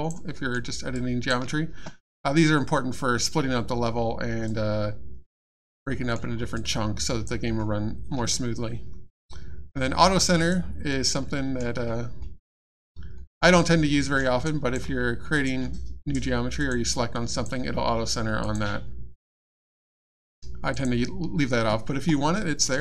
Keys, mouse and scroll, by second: 0.3 alt+middle click, 0.9 alt+click, 4.5 alt+click, 5.9 middle click, 6.2 scroll down 1, 6.5 alt+click, 10.4 click, 11.2 middle click, 13.1 middle click, 14.4 alt+click, 15.3 click, 15.4 click, 16.6 click, 18.4 click, 20.7 click, 22.3 middle click.